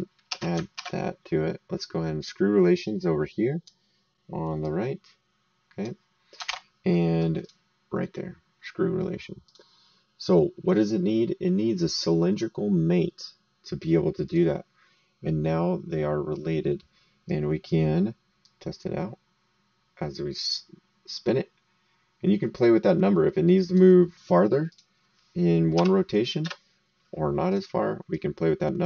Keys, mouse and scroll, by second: 0.3 ctrl+c, 0.7 ctrl+v, 1.8 click, 4.6 click, 6.4 alt+Tab, 7.4 click, 9.4 click, 14.2 click, 17.2 right click, 18.4 click, 24.7 click, 25.7 KP_2, 26.4 KP_Enter, 27.5 click.